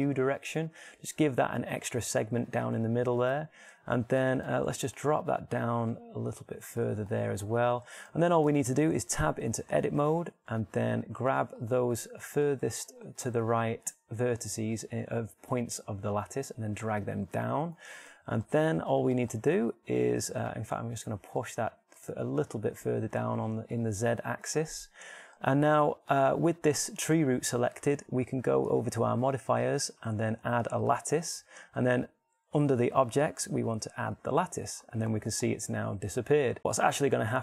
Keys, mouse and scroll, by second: 2.8-4.1 middle drag, 6.5 g, 10.2 Tab, 12.3 b, 16.0 g, 19.2 click, 19.4 Tab, 21.5 g, 25.5 click, 27.5-31.6 right drag, 32.4-34.8 middle drag, 34.8-35.8 drag, 36.2 shift+middle click, 36.9-37.4 middle drag.